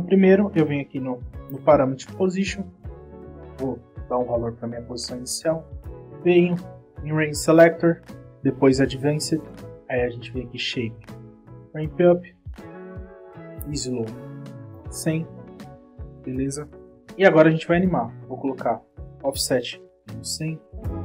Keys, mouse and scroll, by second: 2.7 click, 8.0 click, 9.1 click, 10.1 click, 11.0 click, 11.1 click, 11.6 click, 12.5 click, 13.3 click, 14.2 click, 15.5-16.3 scroll up 2, 19.1 click.